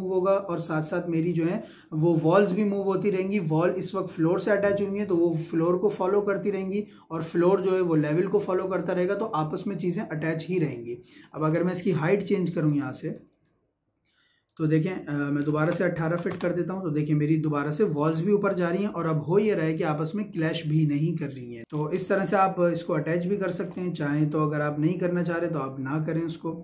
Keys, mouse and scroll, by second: 11.6 Escape, 12.5 click, 16.0 ', 16.3 Return, 17.9 click, 20.6 click, 21.6 shift+middle click, 22.2 scroll down 1, 22.4-26.0 shift+middle drag.